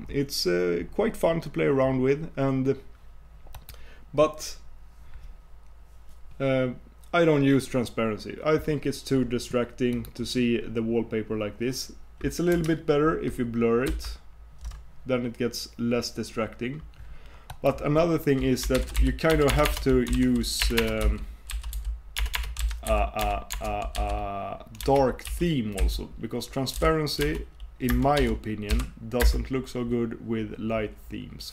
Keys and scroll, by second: 13.9 shift+super+w.